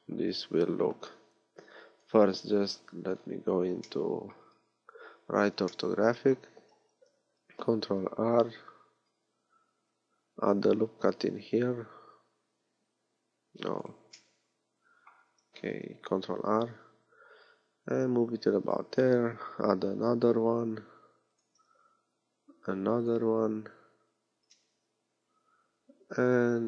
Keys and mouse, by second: 2.0 KP_3, 9.6 ctrl+r, 15.7 ctrl+r, 19.6 ctrl+r, 22.5 ctrl+r, 25.5 ctrl+r.